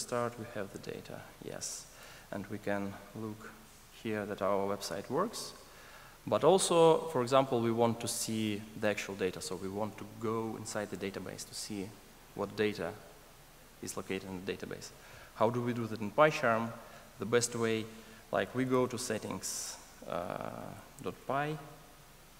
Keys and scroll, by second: 18.8 ctrl+shift+super+o.